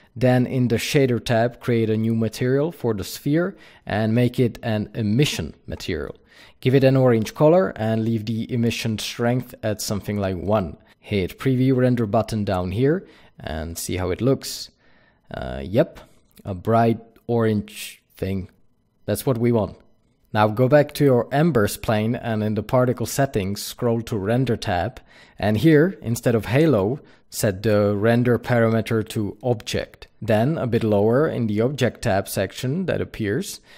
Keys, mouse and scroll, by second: 0.4-1.4 drag, 1.8-15.2 drag, 20.2-20.7 middle drag, 20.2-20.7 scroll up 2, 20.7 click, 22.1 click, 22.8-23.2 scroll down 1, 27.9-33.7 drag.